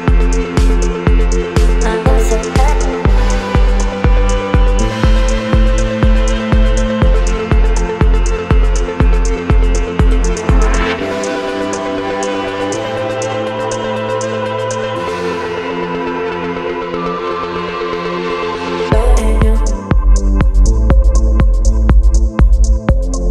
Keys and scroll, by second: 1.2 Down, 4.8 space, 22.7 space.